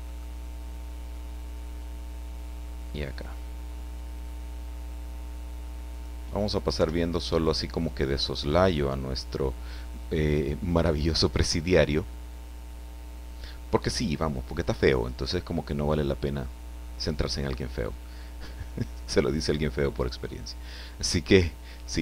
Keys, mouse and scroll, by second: 0.0 click, 5.9 click, 6.7 i, 7.3 click.